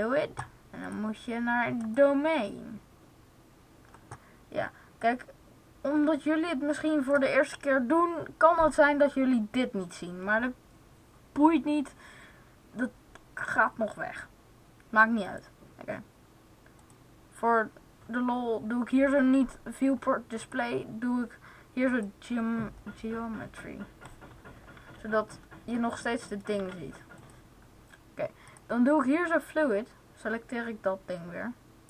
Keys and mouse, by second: 4.9-6.8 drag, 15.1-20.3 right drag, 20.3-22.3 drag, 24.7 z, 26.5 z, 29.8 click, 31.7-31.8 drag.